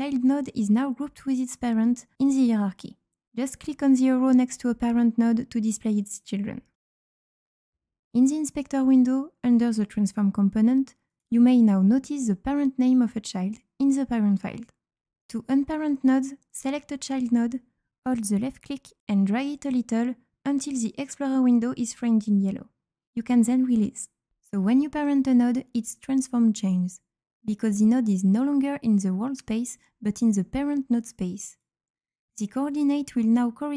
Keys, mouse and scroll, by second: 5.5 click, 6.7-8.6 drag, 11.0 click, 14.1 click, 18.2 click, 19.2-23.2 drag, 31.4 click.